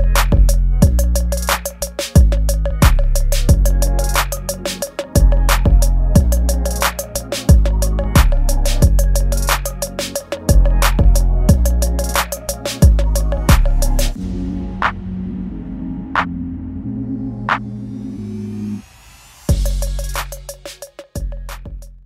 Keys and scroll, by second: 1.4 ctrl+z, 2.3 space, 5.1 ctrl+z, 5.9 ctrl+shift+z, 10.4 ctrl+s, 11.5 space, 13.1 space, 13.8 space, 14.4 ctrl+s.